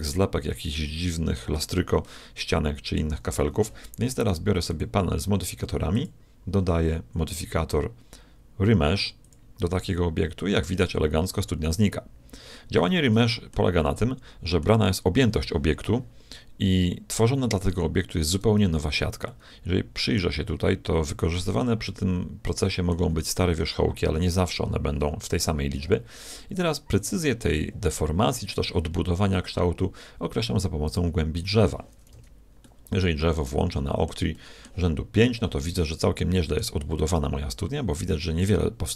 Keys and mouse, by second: 2.1-3.7 middle drag, 4.7-7.7 drag, 11.3-13.3 middle drag, 13.9-15.9 middle drag, 18.6 z, 19.3-23.4 middle drag, 23.8-30.9 middle drag, 30.9-32.6 drag, 32.1 z, 32.7-38.9 middle drag.